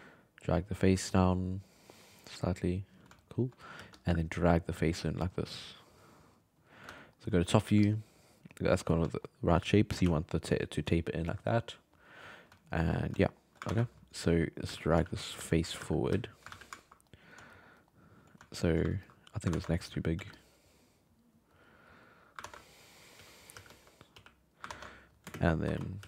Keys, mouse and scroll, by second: 0.1-3.2 drag, 3.2 alt+middle click, 3.8 f, 4.3 click, 4.7 f, 5.1-7.0 drag, 7.0 alt+middle click, 7.6 f, 8.2 click, 9.1 shift+middle click, 10.0-10.8 d, 10.3 click, 10.6 d, 11.9 click, 12.6 alt+middle click, 13.2 alt+middle click, 13.7 ctrl+Tab, 14.3 right click, 14.6-16.1 typing, 16.5 alt+a, 16.8-17.5 ctrl+middle drag, 17.7 alt+middle click, 18.9-19.3 ctrl+middle drag, 19.3 right click, 19.5 ctrl+Tab, 20.2 f, 20.6-22.4 drag, 22.4 ctrl+Tab, 22.8 right click, 23.2 r, 23.5 g, 24.1 r, 24.7 ctrl+Tab, 25.3 shift+space, 25.6 5, 25.8 middle click, 26.0 f.